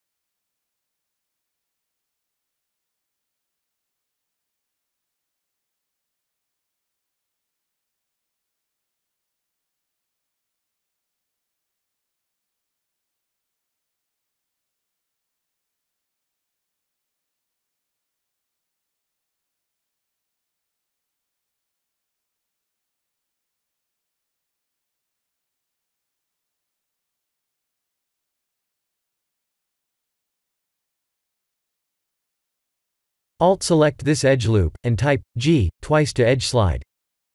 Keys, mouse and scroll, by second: 1.5-2.2 scroll up 4, 2.2 click, 2.8 Tab, 3.5 3, 4.0 middle click, 5.2 click, 6.3 ctrl+KP_Add, 6.4 ctrl+KP_Add, 7.2 middle click, 9.6 click, 10.7 click, 12.2 click, 14.7 click, 17.2 click, 19.7 ctrl+z, 20.1 ctrl+z, 20.5 ctrl+z, 20.9 ctrl+z, 23.2 click, 27.3 click, 28.3 click, 30.8 click, 32.7 click, 33.3 click, 34.2-36.3 scroll up 1, 36.3-36.7 scroll up 3, 36.7 2, 37.2 alt+click.